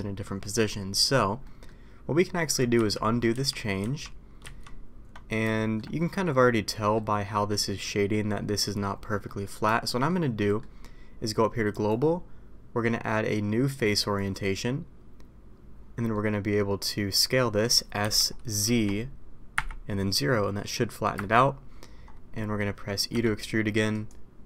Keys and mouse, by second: 1.4 middle drag, 3.0 ctrl+z, 5.5 shift+middle drag, 6.0 middle click, 6.7 middle click, 7.3 middle click, 8.1-8.4 middle drag, 9.2 middle click, 9.8 shift+middle drag, 10.4 middle click, 16.1 middle click, 18.0 s, 22.3 middle click, 23.2 e.